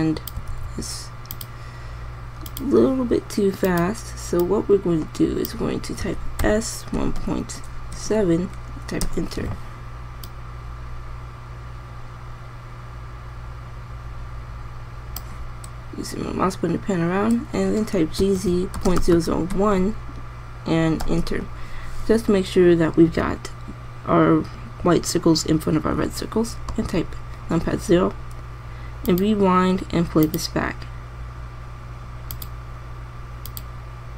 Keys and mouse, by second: 1.3 alt+a, 7.2 s, 11.2-13.0 drag, 19.0 g, 27.7 KP_0.